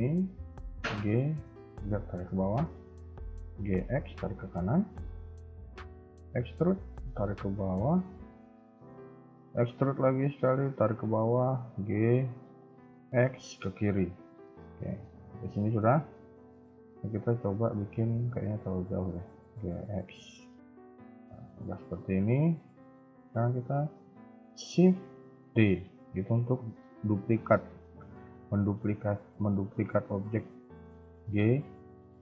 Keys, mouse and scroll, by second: 0.6 g, 2.2-2.6 scroll down 3, 2.6 shift+middle click, 2.8-3.4 shift+scroll up 2, 3.4 g, 5.5 shift+middle click, 6.0 e, 8.5 shift+middle click, 9.6 e, 11.5 g, 14.7 scroll down 2, 15.0 middle click, 16.0 KP_1, 16.5 KP_3, 16.6 KP_1, 17.0-17.8 scroll up 1, 18.1 g, 20.3 KP_3, 20.7 Tab, 21.0 scroll down 3, 21.3 shift+middle click, 21.7 scroll up 2, 25.4 shift+d.